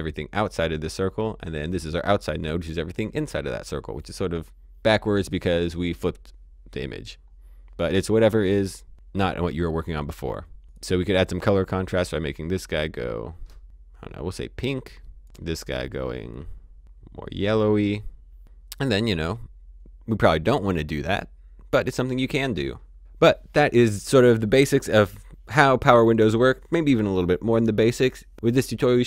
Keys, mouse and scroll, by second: 10.6 click, 17.4-18.1 scroll, 18.1 scroll down 1, 19.3 click.